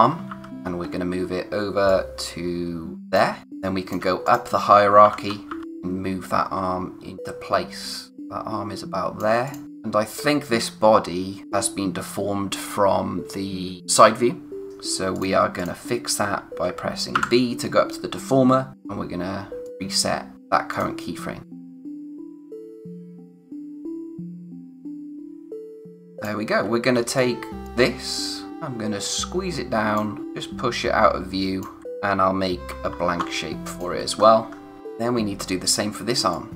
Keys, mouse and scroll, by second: 0.0-0.5 typing, 0.8-1.8 scroll up 1, 1.8 click, 3.4 space, 3.6 click, 3.9 space, 4.2 click, 5.0-5.4 typing, 5.6 click, 15.1 click, 17.1 b, 19.6 click, 24.0-24.4 scroll up 1, 26.0 scroll up 1, 26.9 space, 27.1 click, 27.4 space, 28.4 space, 28.5 click, 32.6 alt+shift+r, 33.7 click, 34.1-34.8 scroll down 1, 34.8 click, 36.3 click.